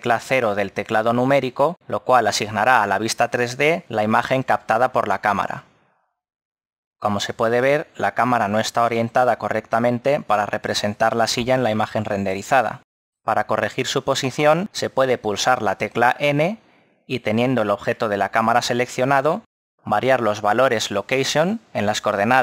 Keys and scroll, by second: 6.4 KP_0, 16.0 n.